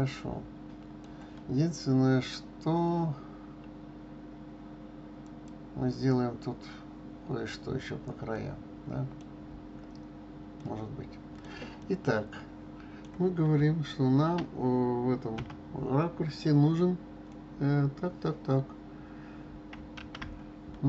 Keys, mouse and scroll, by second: 5.2 click, 8.3-14.8 middle drag, 15.3 KP_7, 20.0 shift+a.